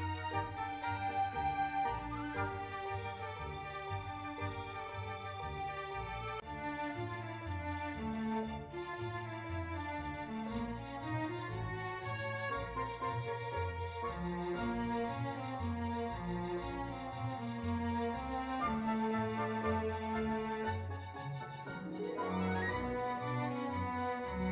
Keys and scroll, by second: 10.6-12.4 typing, 21.2 ctrl+v, 22.6-24.5 typing.